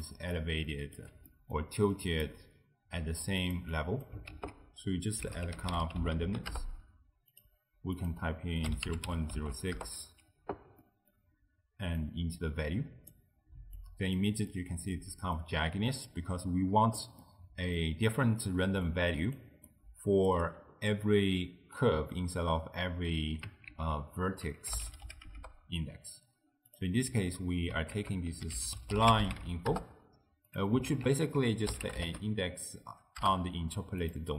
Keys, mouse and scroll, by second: 0.1 d, 1.0 d, 1.3 middle click, 2.0 click, 3.5 click, 3.8 click, 4.4 ctrl+a, 6.3 s, 8.0-10.9 drag, 10.9-12.0 middle drag, 12.0 drag, 13.8 click, 14.5-18.9 middle drag, 18.9 d, 18.9 click, 19.4 d, 20.3 d, 22.9 d, 23.7 ctrl+a, 27.2 x, 28.0 ctrl+a, 31.0 ctrl+a.